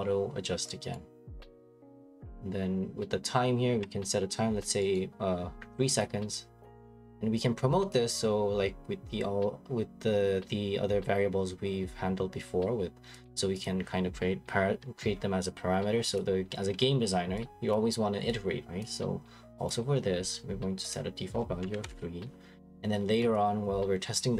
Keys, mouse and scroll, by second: 0.9 right click, 1.3 middle click, 1.3 middle click, 2.2 click, 4.9 right click, 6.0 click, 7.9 click, 13.2 click, 13.6 click, 16.1 click, 17.7 click, 18.8 click, 19.7 click, 20.9 click, 21.6 3, 21.8 Return, 23.3 click.